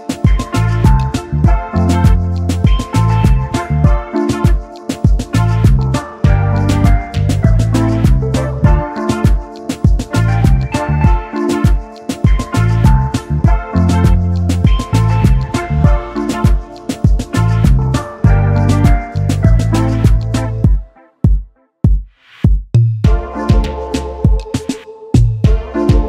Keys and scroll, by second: 24.3-26.0 typing, 24.5 Tab.